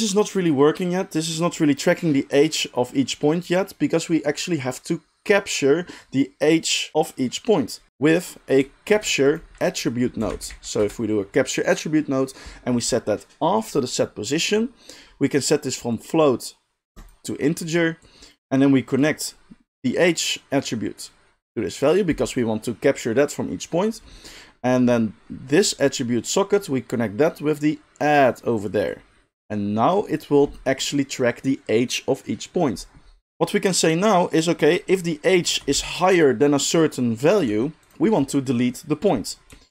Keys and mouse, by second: 7.9 shift+a, 8.9 shift+a, 13.8-16.0 middle drag, 16.0-36.3 drag, 35.7 g, 36.3-36.7 middle drag, 36.7-37.9 drag, 37.4 g, 37.9 middle click, 38.0-39.7 drag.